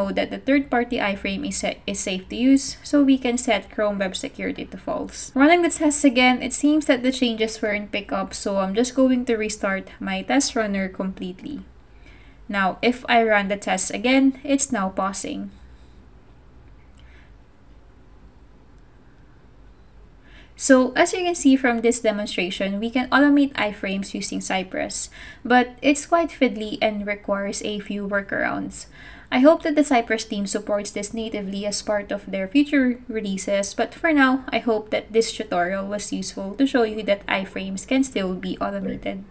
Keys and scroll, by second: 5.1 super+/, 5.6 super+s, 11.2 super+Tab, 11.6 super+Tab, 11.7 super+Tab, 12.4 ctrl+c, 12.7 Up, 13.0 Return, 22.2 super+Tab, 23.3 super+Tab.